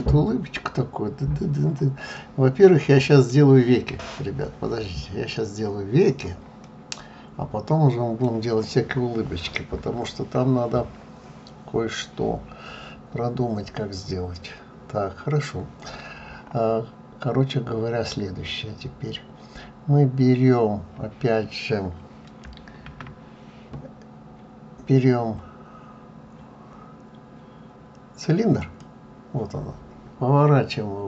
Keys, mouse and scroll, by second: 2.1 middle click, 6.6 middle click.